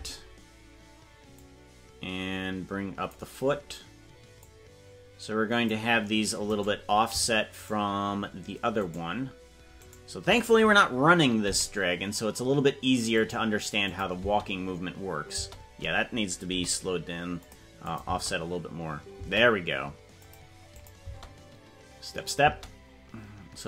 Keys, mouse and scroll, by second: 1.5 click, 4.4-5.7 drag, 6.5-7.6 right drag, 11.4 g, 14.0 click, 14.2 space, 16.5 g, 17.9 click, 18.1 space, 20.3 click, 20.8 click, 21.0 space.